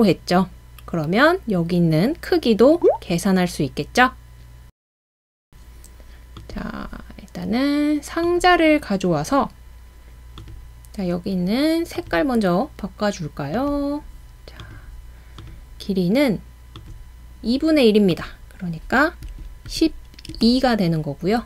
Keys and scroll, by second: 5.2 Return, 5.2-5.5 typing, 19.3-20.3 typing.